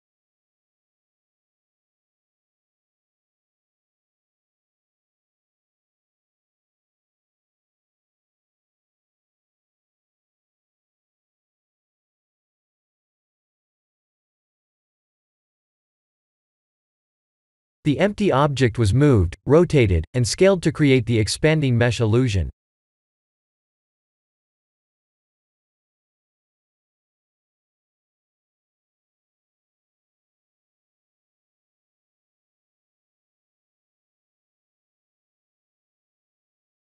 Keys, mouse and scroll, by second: 2.6-5.0 scroll down 6, 5.0-5.4 scroll down 5, 14.0 click, 14.7 click, 15.7 click, 17.1 click, 28.4 click, 29.0 click, 31.9 click, 32.1 click, 32.5 click, 33.1 click, 33.7 click, 34.4 click, 35.3 click, 35.9 click, 36.4 click.